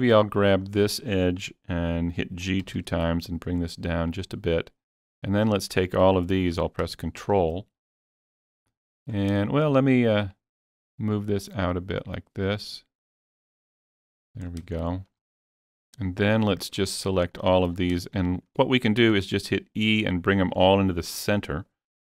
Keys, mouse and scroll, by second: 0.6 click, 2.6 g, 2.9 g, 4.1 click, 6.6-6.9 scroll down 2, 8.3 scroll up 1, 8.7 shift+middle click, 9.1 scroll up 2, 9.5 shift+middle click, 10.2 click, 10.3 click, 11.1-16.4 drag, 14.5 scroll down 1, 14.8 shift+middle click, 16.9 scroll up 2, 17.3 shift+middle click, 17.7 scroll down 1, 18.1 shift+middle click.